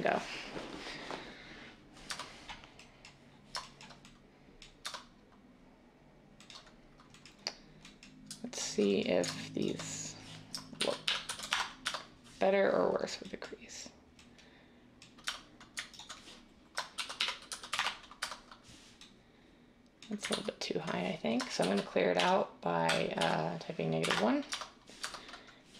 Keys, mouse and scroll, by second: 2.1 Tab, 4.8 Tab, 10.7-11.4 typing, 11.5 Return, 11.8 Tab, 15.2 Tab, 15.9-18.2 typing, 20.4 ctrl+z, 21.3-24.5 typing.